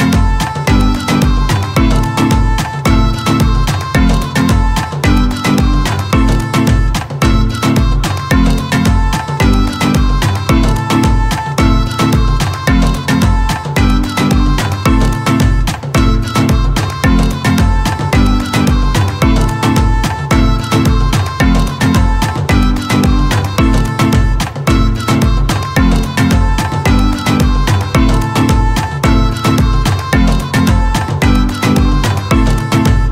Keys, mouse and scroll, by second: 0.0-2.2 typing, 1.4 ctrl+z, 5.1 scroll up 2, 5.5 click, 5.7-6.4 scroll down 2, 6.4-7.0 typing, 9.2 space, 9.8 o.